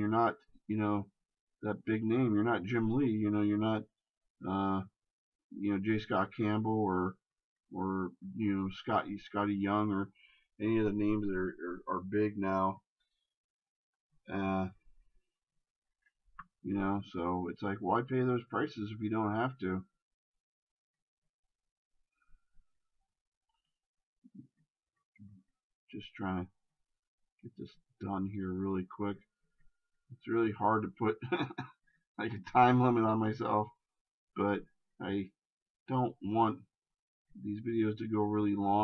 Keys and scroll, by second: 13.1 shift+space.